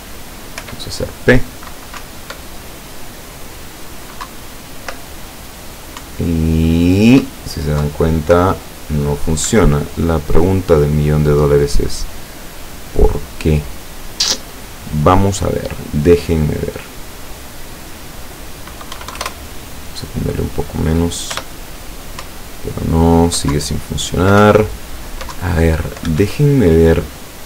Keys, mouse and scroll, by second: 0.7 p, 2.1 Up, 4.3 Down, 6.1 Up, 7.9 Down, 9.6 Escape, 16.4 click, 17.4 click, 18.0 click, 19.0 KP_1, 19.2 KP_0, 19.2 KP_Enter, 21.4 p, 22.3 Up, 23.6 Down, 24.5 Up, 25.4 Down, 26.2 Escape.